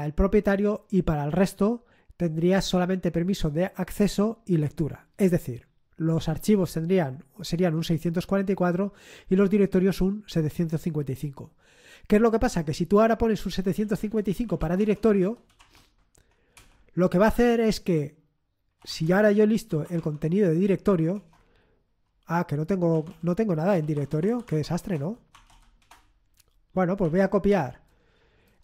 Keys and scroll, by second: 13.3-16.0 typing, 16.6 Return, 18.5-20.3 typing, 21.1 Return, 22.7-28.6 typing.